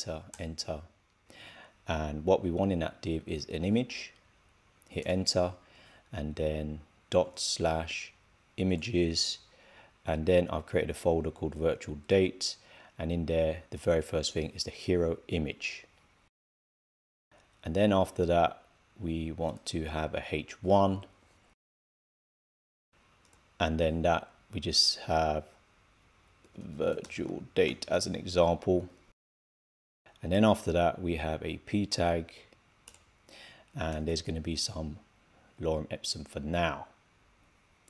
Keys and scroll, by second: 26.3 shift+v, 27.6 shift+d.